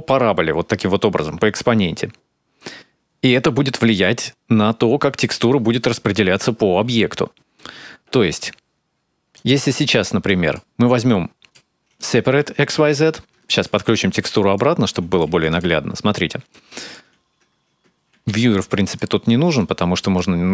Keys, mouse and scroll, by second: 4.6-5.2 scroll down 3, 6.3-6.8 scroll down 3, 6.8 middle click, 9.2 click, 10.1 click, 10.7 click, 11.8 click, 13.4 ctrl+shift+click, 13.9 click, 14.9 click, 15.1 x, 15.3 click, 16.3 click, 18.0 ctrl+x, 18.5 click, 19.4 click.